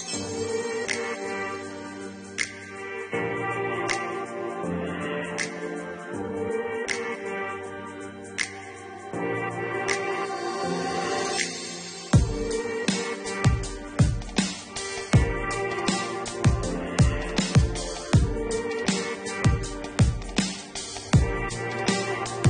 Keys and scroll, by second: 17.2 -.